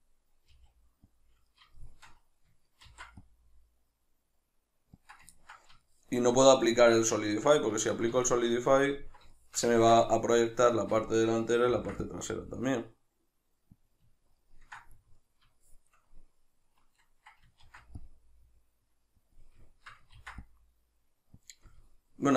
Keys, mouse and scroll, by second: 0.5 g, 1.3 click, 1.5-5.1 shift+middle drag, 2.9 ctrl+r, 5.1 click, 5.4-13.9 ctrl+middle drag, 11.7 ctrl+r, 13.9 click, 14.2-16.0 ctrl+middle drag, 17.6 ctrl+r, 19.4 click, 19.7 shift+middle click, 20.2 ctrl+r, 21.5-22.3 shift+middle drag, 21.5 click.